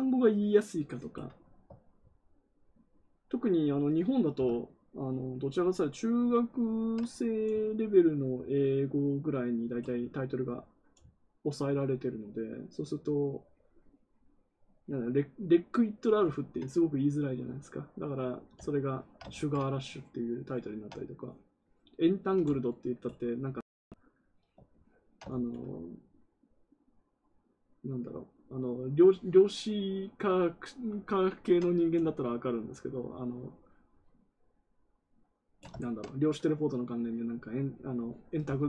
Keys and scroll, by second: 19.3 ctrl+z, 25.2 ctrl+z.